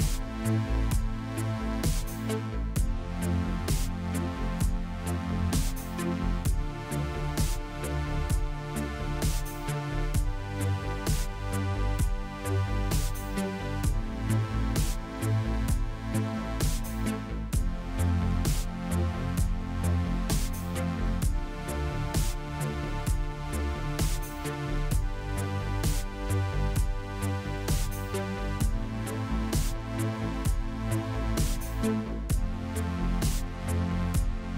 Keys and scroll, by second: 0.9 3, 3.2 shift+z, 9.0 shift+z, 10.6 f, 11.5 Tab, 14.6 Tab, 17.8 3, 18.8 i, 20.4 e, 22.7 ctrl+b, 23.7 Tab, 27.6 Tab, 28.0 a, 29.7 Tab, 32.5 shift+c.